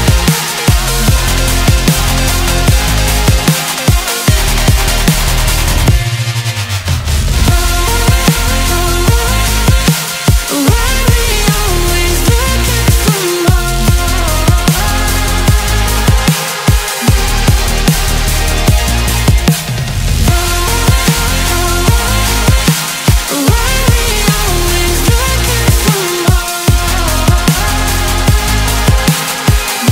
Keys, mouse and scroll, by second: 5.1 alt+m, 5.9-10.4 middle drag, 10.4 click, 11.5 click, 13.0 click, 14.9 click, 15.5 scroll up 2, 16.9 alt+m, 17.5-18.6 middle drag, 18.6 scroll down 3, 19.1-21.9 middle drag, 21.9 click, 22.3 scroll up 5, 22.9 scroll down 1, 23.1-24.3 middle drag, 24.3 click, 25.2 alt+m, 25.5-28.5 middle drag.